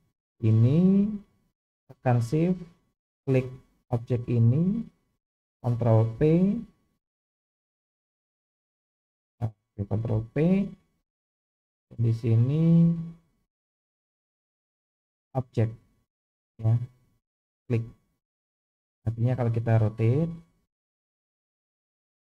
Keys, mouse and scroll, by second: 4.3 shift+click, 6.1 ctrl+p, 10.1 ctrl+p, 18.6 click, 20.3 r.